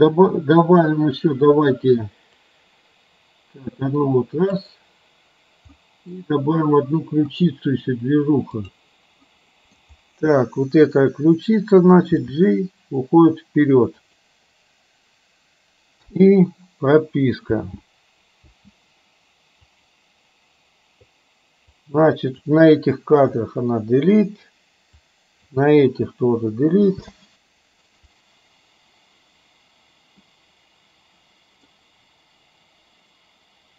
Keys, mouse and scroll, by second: 2.5-4.7 drag, 5.9 middle click, 8.7 click, 9.4 middle click, 12.2 g, 16.2 i, 17.5 space, 18.5 space, 19.8 click, 21.8-22.5 drag, 23.4 Delete, 25.0-25.5 drag, 26.0 Delete, 27.0 space, 30.3-31.8 middle drag.